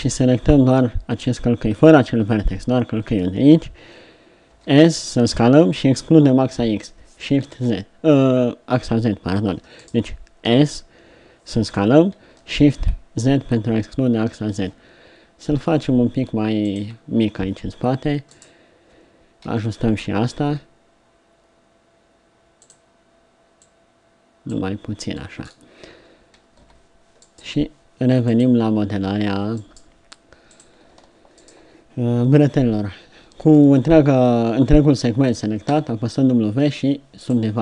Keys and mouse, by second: 4.5 s, 10.5 s, 18.3-20.5 drag, 19.5 s, 26.6 z, 29.5-31.2 drag, 35.6 w.